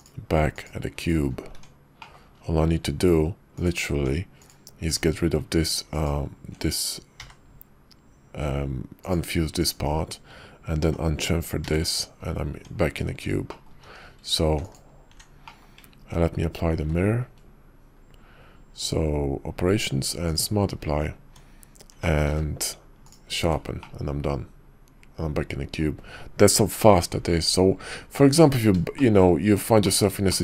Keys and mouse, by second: 0.5 shift+click, 1.5 Tab, 2.0 click, 2.5 Tab, 3.5 click, 3.9 Tab, 4.4 click, 4.8 click, 5.9 ctrl+click, 7.2 y, 10.8 y, 12.5 Tab, 13.5 click, 13.8 q, 15.4 click, 16.8 q, 21.3 Tab, 21.9 Tab, 22.3 q, 23.8-25.8 drag, 28.5 middle click, 29.1 shift+middle click, 29.9 middle click.